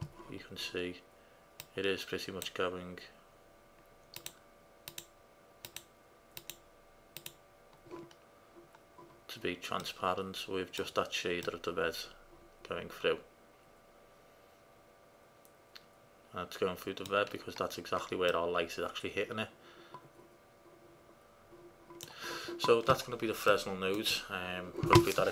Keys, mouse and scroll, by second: 1.8-3.6 drag, 4.4 click, 7.1-8.2 middle drag, 8.2 click, 12.1 middle click, 12.2 middle click, 12.4-13.5 middle drag, 18.7-19.1 middle drag, 19.2 middle click, 19.3 middle click, 19.6 middle drag, 20.4-21.0 middle drag, 21.2 middle click, 21.7 middle drag, 23.7-25.3 middle drag.